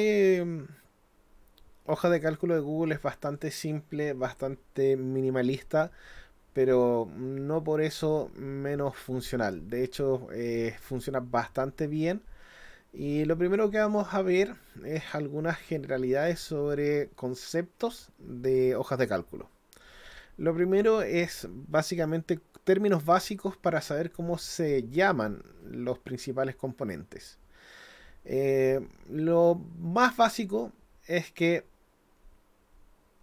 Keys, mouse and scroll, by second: 15.0 click, 16.4 click.